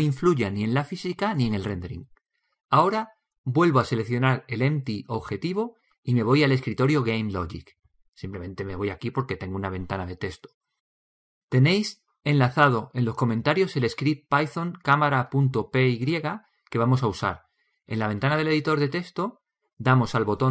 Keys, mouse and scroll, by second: 6.5-9.9 drag, 11.4-20.5 drag.